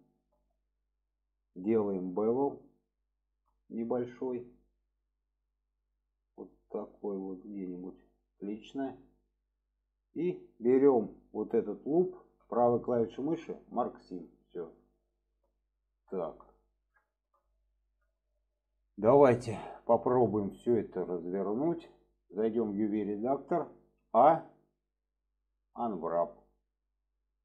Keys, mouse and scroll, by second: 1.9 shift+middle drag, 3.9 middle click, 5.0 click, 8.3 click, 9.1-9.7 middle drag, 11.0 click, 12.1 alt+shift+click, 12.8 right click, 15.1 middle click, 16.1 shift+middle click, 17.1 shift+middle click, 18.5-21.3 middle drag.